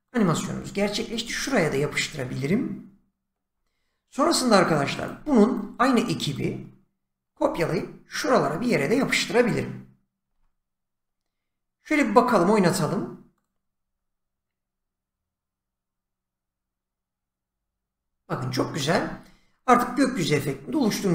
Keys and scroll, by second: 1.1 ctrl+v, 7.3 ctrl+c, 10.2 ctrl+v.